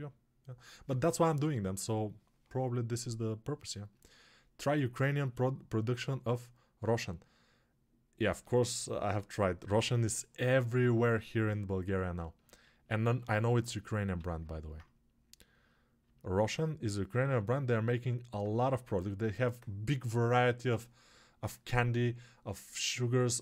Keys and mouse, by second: 11.7-23.4 ctrl+alt+drag, 12.7 alt+q, 14.1 g.